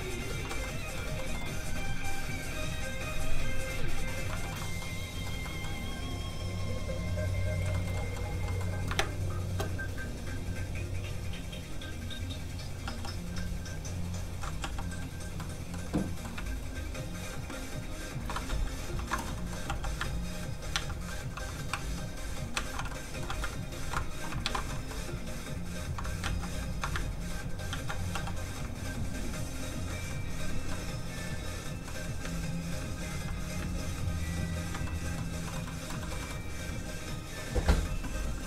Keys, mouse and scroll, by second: 0.6 middle click, 2.6 click, 4.2 middle click, 4.3 shift+middle click, 4.8 middle click, 7.7 shift+middle click, 7.9 middle click, 8.0 middle click, 8.9 shift+space, 9.6 click, 9.7 click, 12.8 f, 13.0 click, 13.4 ctrl+click, 14.2 ctrl+z, 14.7 f, 14.8 click, 15.3 middle click, 16.6 ctrl+shift+click, 18.9 ctrl+click, 19.0 ctrl+i, 19.2 middle click, 19.6 f, 19.8 click, 20.1 ctrl+click, 20.7 ctrl+z, 22.5 alt+shift+z, 22.9 shift+middle click, 23.0 middle click, 23.8 ctrl+i, 24.4 ctrl+alt+shift+z, 24.7 middle click, 25.4 click, 26.2 ctrl+z, 27.0 ctrl+click, 27.7 ctrl+z, 28.2 f, 28.3 click, 28.7 ctrl+click, 30.7 click, 30.8 middle click, 32.3 ctrl+click, 33.1 ctrl+z, 33.9 ctrl+click, 34.8 click, 34.9 middle click, 35.4 shift+middle click, 35.6 middle click, 35.7 middle click, 36.0 shift+middle click, 36.2 middle click.